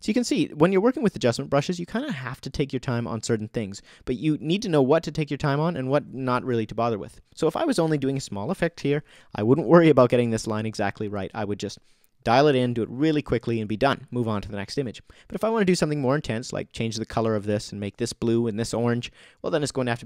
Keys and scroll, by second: 8.7 o.